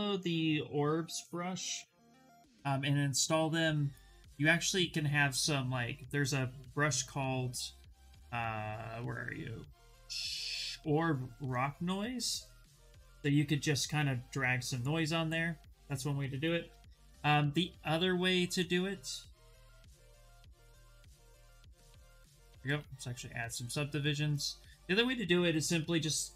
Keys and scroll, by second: 1.4 b, 12.5 s, 17.6 Escape, 19.3 d, 25.9 b.